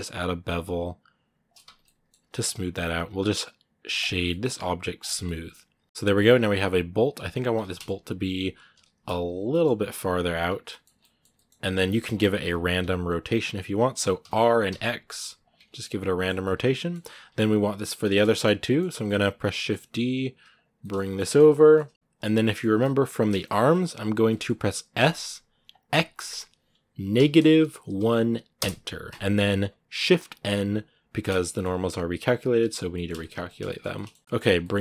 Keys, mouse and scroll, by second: 1.4 Tab, 1.6 middle click, 2.3 w, 5.0 scroll down 3, 5.0-6.1 middle drag, 6.1 Tab, 6.1 scroll up 2, 6.6 right click, 7.5 middle click, 8.2 right click, 8.5 l, 10.4 scroll down 2, 10.5 middle click, 10.7 Tab, 10.7-11.7 scroll up 2, 10.8 middle click, 11.7 middle click, 11.8 scroll down 2, 12.2 r, 15.5 scroll down 2, 15.6-16.9 middle drag, 16.9-17.8 scroll up 1, 17.8 middle click, 18.3 scroll up 1, 18.5 middle click, 18.7 Tab, 18.8 middle click, 19.3 shift+d, 20.6 middle click, 21.0 scroll up 2, 21.3-23.0 shift+middle drag, 23.0 scroll up 1, 23.2-24.8 shift+middle drag, 24.8 s, 31.2-32.4 middle drag, 32.4 shift+n, 32.7 shift+middle click, 33.6 scroll up 2, 33.7 middle click, 34.4 g.